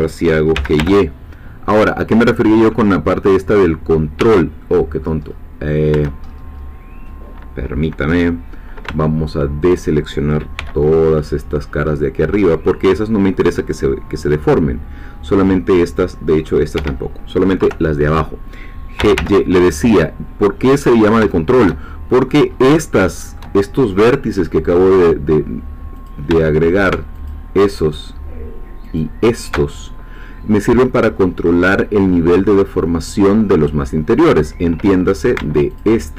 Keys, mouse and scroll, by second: 0.5 g, 0.8 y, 4.2 Escape, 4.6 middle click, 5.3-5.9 scroll down 2, 6.2-8.9 shift+scroll up 3, 9.0 shift+middle click, 11.2-16.6 middle drag, 16.8 Escape, 17.6 3, 19.0 g, 19.2 y, 20.8 click, 21.3-22.5 shift+middle drag, 22.5-22.8 scroll up 3, 22.8 shift+middle click, 26.0 click, 27.3 alt+shift+click, 29.0 alt+shift+click, 30.0 scroll down 2, 31.1-35.4 scroll up 2, 35.8-36.1 alt+shift+drag.